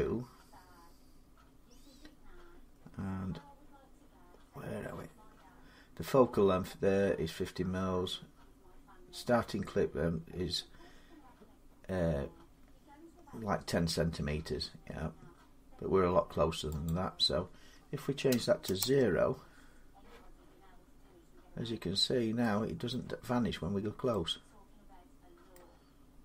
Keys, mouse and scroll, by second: 16.7 click, 18.1 0, 18.6 Return, 20.1 scroll down 5, 20.9-21.2 scroll up 3, 21.2-21.8 scroll, 22.2 middle click, 22.7 middle click, 23.2 middle click, 23.4 scroll, 25.3 middle click, 25.8-26.2 scroll.